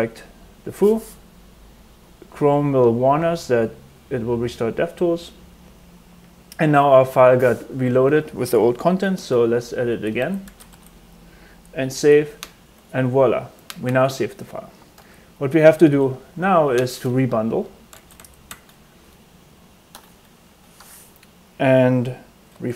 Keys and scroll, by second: 7.8 space, 9.1-11.1 typing, 12.7 super+s, 14.9 super+Tab, 15.6 super+Tab, 17.6-18.6 typing, 19.8 Return, 20.8 super+Tab, 22.5 super+r.